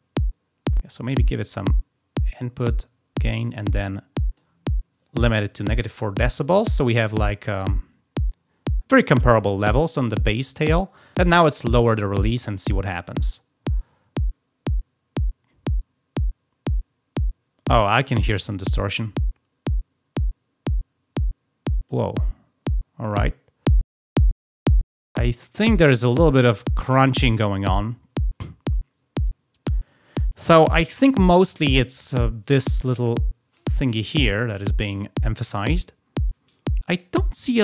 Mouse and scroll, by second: 1.5-4.3 drag, 13.1-21.8 drag.